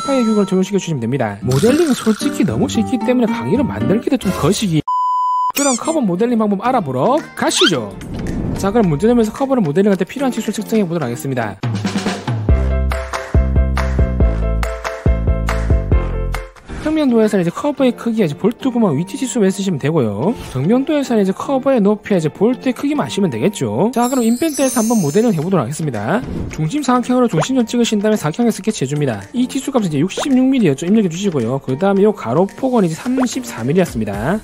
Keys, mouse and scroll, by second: 11.7 w, 11.7 right click, 11.9 click, 12.1 click, 12.3 click, 12.4 right click, 12.6 click, 12.9 click, 13.1 click, 13.3 right click, 13.4 click, 14.1 click, 14.8 click, 14.9 right click, 15.1 click, 15.4 right click, 15.5 click, 15.8 click, 16.2 click, 27.8 4, 28.2 click, 29.1 click, 29.3 d, 29.9 click, 30.2 click, 31.3 scroll down 2, 31.7 middle click, 32.5-34.3 typing, 32.7 click, 33.2 click.